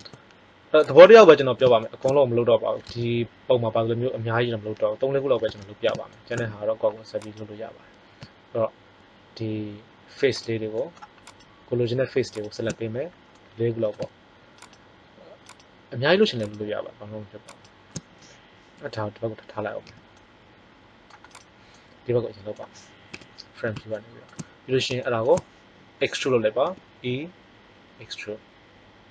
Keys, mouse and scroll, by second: 7.2-8.8 right drag, 10.4 right click, 17.7-19.3 drag, 19.9 c, 21.4 middle click, 23.1 KP_1, 26.5 e.